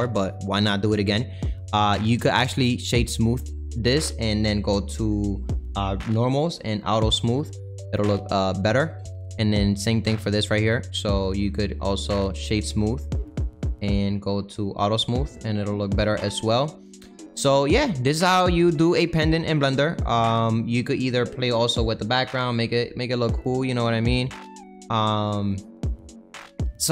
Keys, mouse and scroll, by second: 1.8 click, 3.0-6.7 right drag, 6.7 click, 7.4 click, 7.7-9.8 middle drag, 9.8 click, 10.2 click, 12.9-15.5 right drag, 15.5 click, 16.4 click, 16.8 middle click, 17.4 scroll down 2, 17.7-20.0 middle drag, 20.0-20.4 scroll down 2, 20.4-22.8 middle drag, 22.8 click, 24.9-26.0 middle drag, 26.0 click, 26.5 middle click.